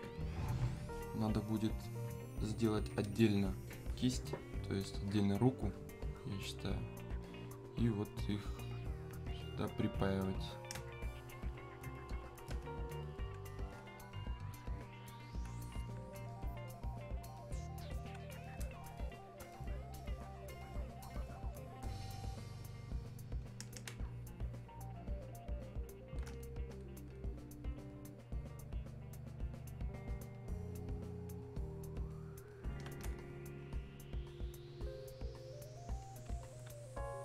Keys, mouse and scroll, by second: 5.8-10.3 alt+drag, 10.8 space, 11.6 click, 11.7 space, 12.9-20.3 alt+drag, 20.3-23.9 ctrl+shift+drag, 23.9 ctrl+space, 34.5-37.2 ctrl+drag.